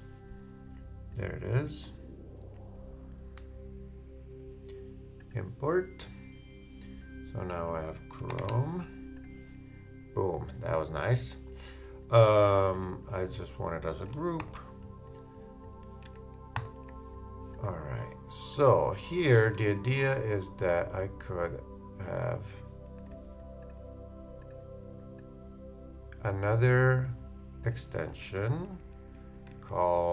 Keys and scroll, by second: 14.4 shift+super+g, 16.5 shift+super+g, 19.0 shift+Left, 23.0 super+z, 28.1 super+d, 28.4 shift+super+Left, 29.5 shift+Up.